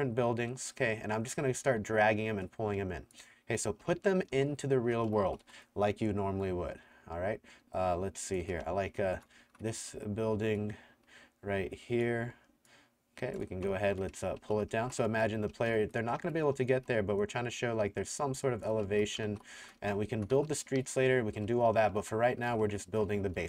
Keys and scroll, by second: 3.9-5.9 typing, 8.3-10.3 typing, 12.1 t, 13.3-16.8 typing, 18.6-23.4 typing, 23.3 Escape.